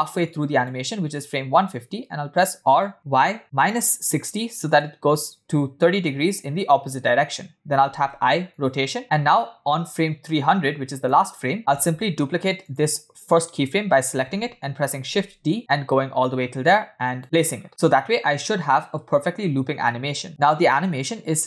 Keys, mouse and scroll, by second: 0.2 click, 3.0 r, 8.7 i, 10.0-10.6 scroll down 5, 10.7 click, 12.0 Right, 13.8 click, 16.6 shift+d, 17.8-18.9 scroll up 7, 18.9 middle click, 19.0 space.